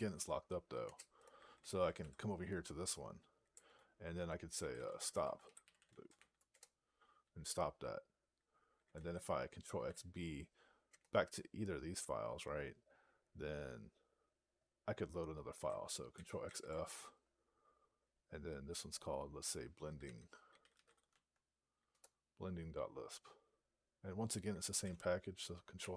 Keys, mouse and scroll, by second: 0.7 Return, 4.0 (, 6.4 Return, 10.8 Return, 16.3 ctrl+f, 19.6-21.1 typing, 21.9 Return.